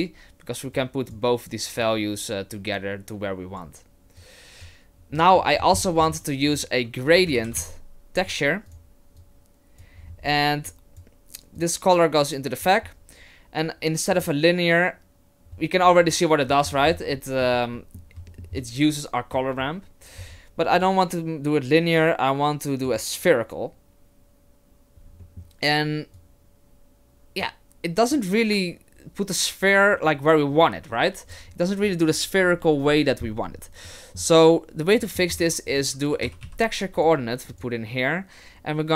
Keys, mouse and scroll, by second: 0.4-0.7 scroll up 1, 0.7 click, 1.8 click, 4.2 click, 5.2 middle click, 5.6-6.1 scroll down 10, 6.1 shift+a, 9.2 click, 10.0-11.6 scroll up 7, 10.7 click, 11.6 click, 14.1 click, 16.1 middle click, 16.6-17.0 scroll down 6, 17.2 shift+middle click, 17.7 middle click, 18.3 shift+middle click, 20.6 scroll up 4, 20.7 click, 25.0-25.9 scroll down 3, 25.2 middle click, 26.1 click, 28.1 click, 35.0 middle click, 35.4 shift+a.